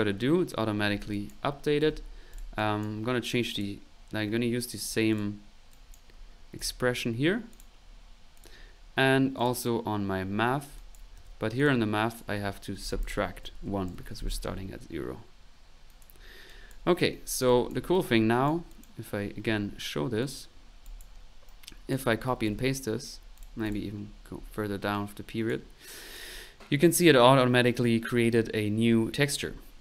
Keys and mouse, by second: 0.0-0.5 typing, 2.5 click, 3.5 click, 4.8 click, 5.7 click, 8.0-9.1 typing, 8.3 click, 9.3 click, 10.7 click, 11.1-11.8 typing, 12.1 click, 15.9-17.1 drag, 16.8 ctrl+1, 17.1 middle click, 17.4 click, 17.6 right click, 18.7 click, 19.4 middle click, 20.2 click, 20.6 middle click, 20.8 click, 21.4 right click, 22.2-22.9 typing, 23.1 ctrl+middle click, 23.3 ctrl+click, 24.9 click, 25.9 click, 26.0-26.8 typing, 26.3 click.